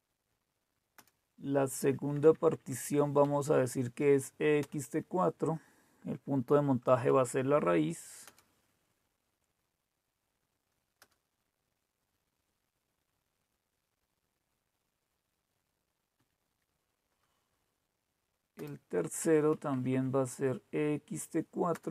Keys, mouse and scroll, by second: 1.0 Return, 2.0 Down, 2.2 Down, 2.4 Down, 2.6 Down, 3.1 Up, 4.5 Return, 7.1 -, 8.2 Return, 11.0 Return, 15.9 Down, 16.1 Down, 18.6 Return, 19.5 Down, 19.6 Down, 19.9 Down.